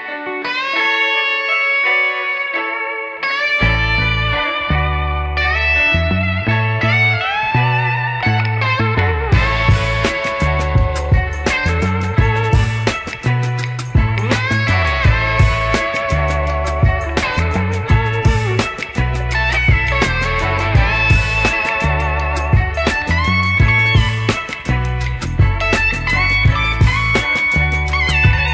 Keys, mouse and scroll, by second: 1.6-2.9 drag, 3.5 click, 4.6-5.7 drag, 6.4 x, 7.6 click, 8.2 click, 9.2 click, 9.4-10.4 drag, 10.6 click, 11.9 click, 13.2 x, 16.7 ctrl+z, 17.7 x, 20.1 ctrl+z, 20.5 click, 21.0 middle click, 22.8 middle click, 23.8 middle click, 24.6 alt+click, 25.6 x, 28.2 KP_1.